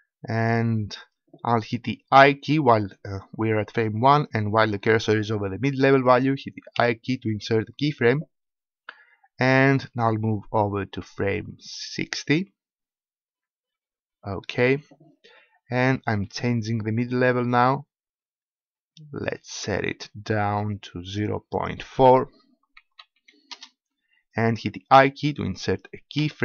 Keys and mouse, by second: 6.7 i, 10.0-11.7 drag, 11.8-16.0 middle drag, 16.0-17.8 drag, 19.8 middle click, 21.5-23.5 drag.